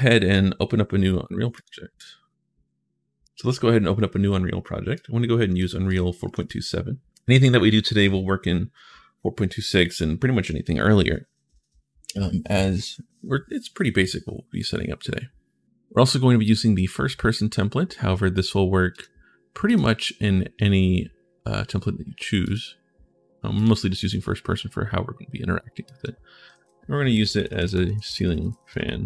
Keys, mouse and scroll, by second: 1.3 click, 3.0 click, 4.7 click, 5.6 click, 6.0 click, 18.7 click, 19.5 click, 22.2 click, 23.3 click, 25.6 click, 26.3 ctrl+a, 27.6-29.0 typing.